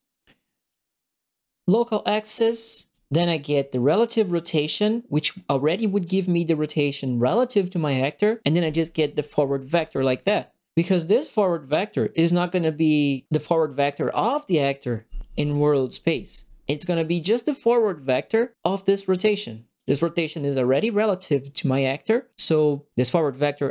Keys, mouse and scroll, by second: 2.4 ctrl+middle click, 10.3 right click, 14.6 click, 18.6 click, 19.7 click.